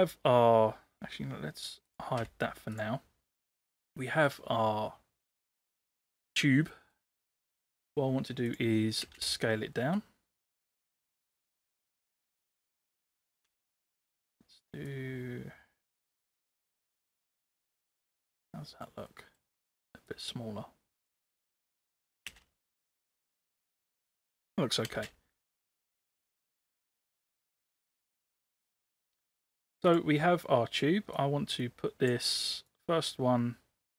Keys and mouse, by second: 1.9 click, 2.2 h, 4.3 click, 6.4-7.0 middle drag, 9.1 space, 9.9-12.0 drag, 13.2 ctrl+c, 13.5 ctrl+v, 14.9-16.0 drag, 16.9 ctrl+c, 17.1 ctrl+v, 18.0-18.9 middle drag, 19.1 middle click, 20.1-21.1 drag, 22.0 ctrl+c, 22.3 ctrl+v, 23.2-24.3 middle drag, 24.9 space, 25.7 click, 27.2 drag, 27.8-28.9 middle drag, 31.2 click, 32.7-33.9 drag.